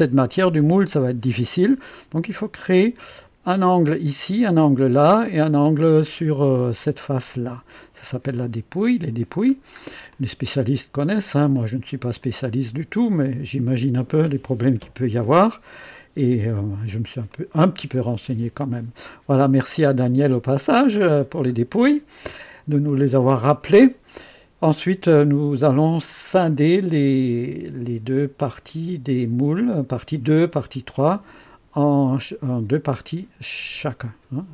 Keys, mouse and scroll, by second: 2.3-3.3 drag, 5.1-5.9 drag, 6.0-6.8 drag, 8.4 click, 9.5-9.9 scroll down 1, 10.1-11.4 drag, 11.6-12.2 drag, 12.2-13.1 drag, 13.2-14.0 right drag, 14.2-15.5 drag, 15.7 right click, 16.7 scroll up 1, 17.3-18.0 right drag, 19.4-20.1 drag, 20.6 scroll up 1, 21.2 scroll down 1, 22.8-23.8 right drag.